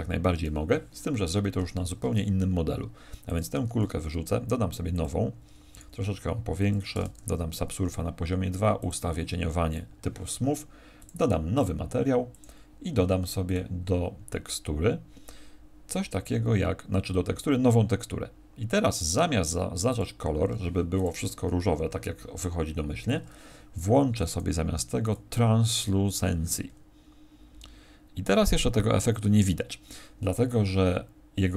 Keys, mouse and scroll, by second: 1.5 Escape, 3.0 x, 3.6 shift+a, 5.7 s, 6.6 click, 7.1 ctrl+2, 8.6 click, 10.9 click, 11.5 click, 13.4 click, 18.6-19.8 scroll down 8, 19.8 click, 20.9 click.